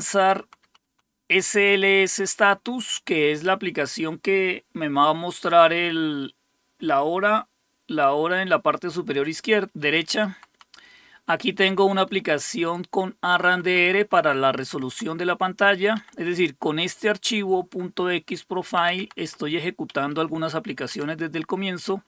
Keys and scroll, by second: 0.2 Right, 0.4 Right, 0.7 Right, 0.9 Right, 2.1 Right, 2.4 Right, 2.6 Right, 10.1 Down, 10.3 Down, 10.5 Down, 11.7 Left, 11.9 Left, 12.1 Left, 13.3 Right, 13.5 Right, 13.6 Right, 13.8 Right, 15.9 Down, 18.8 Down, 19.0 Down, 19.2 Down, 19.9 Up, 20.3 Up, 20.9 Down.